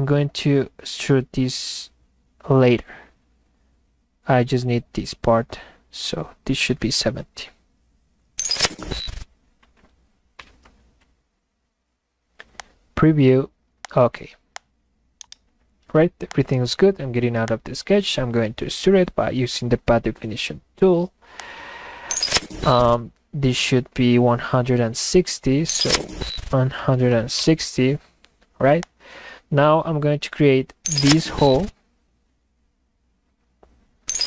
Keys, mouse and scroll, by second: 12.6-13.9 drag, 14.6 click, 15.2 middle click, 15.8 middle click, 16.3 click, 17.5 click, 21.4 click.